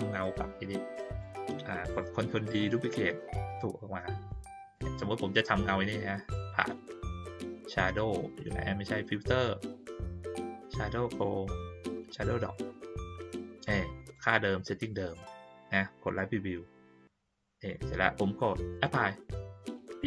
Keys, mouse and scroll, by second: 2.9-4.2 drag, 4.7-5.1 middle drag, 6.2 click, 12.0 click, 13.6-14.1 drag, 16.0 click, 19.9 click.